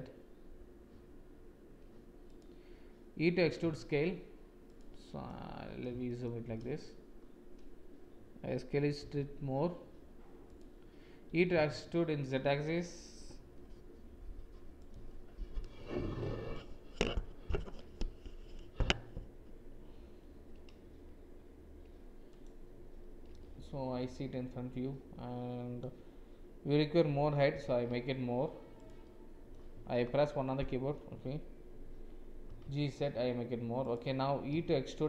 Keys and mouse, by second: 3.4 e, 4.9 click, 6.0 shift+click, 6.5 click, 11.2 e, 23.3 click, 27.4 g, 29.0 click, 29.9 KP_1, 32.4 g, 34.4 e.